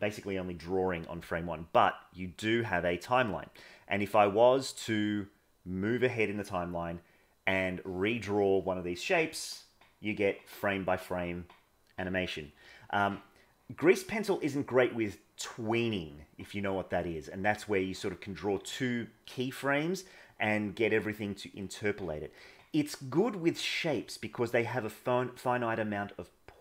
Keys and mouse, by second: 1.6-7.7 drag.